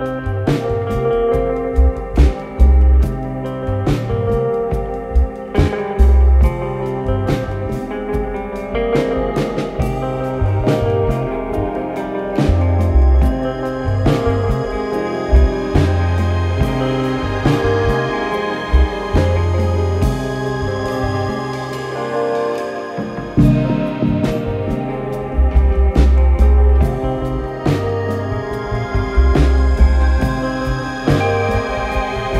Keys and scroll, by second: 0.0-0.1 typing, 7.9 ctrl+z, 7.9 ., 8.8 ctrl+z, 8.9 ., 11.0 ctrl+z, 14.2 Delete, 16.9 ctrl+d, 16.9 Escape, 24.9 0, 25.0 Return, 25.3 0, 25.7 Return, 27.9 F9, 28.8 3, 31.9 ctrl+d, 32.0 Escape.